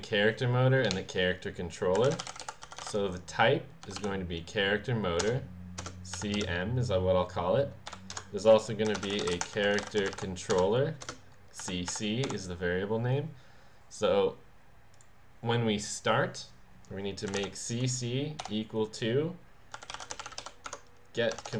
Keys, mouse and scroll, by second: 1.7-3.3 typing, 3.8 Down, 5.2 Return, 5.8-6.9 typing, 7.9-12.7 typing, 8.1 Return, 14.9 click, 17.0-18.4 typing, 19.5-20.7 typing.